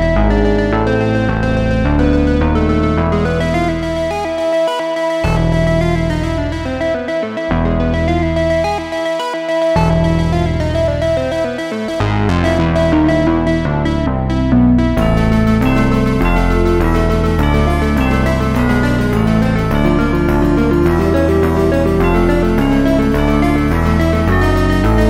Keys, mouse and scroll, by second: 0.1 s, 1.1 click, 1.7-3.0 drag, 5.4-7.6 drag, 7.6 space, 8.0 space, 8.4 Left, 9.4 Tab, 9.9 g, 11.6 s, 13.3 g, 14.9 alt+s, 16.3 g, 17.6 Tab, 17.9-18.7 right drag, 18.7 ctrl+a, 19.3 space, 19.8-20.4 scroll down 3, 20.4-20.9 scroll up 1, 20.9 space, 21.5 Left, 22.1 Tab, 23.3 click, 23.5 click.